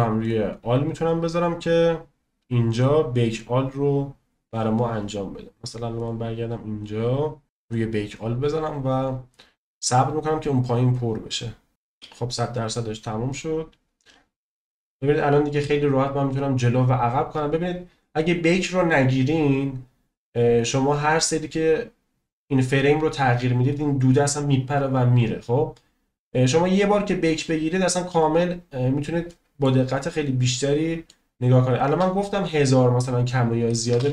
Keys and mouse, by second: 1.0 click, 6.1 click, 7.6-11.7 drag, 12.7-14.9 drag, 15.5-18.7 drag, 20.3 middle click, 21.0 middle click, 21.7-22.8 drag, 23.2 right click, 23.7 middle drag, 26.6-27.5 drag, 27.5 right click, 27.8 click, 29.2 middle click, 30.5 middle click, 33.9 space.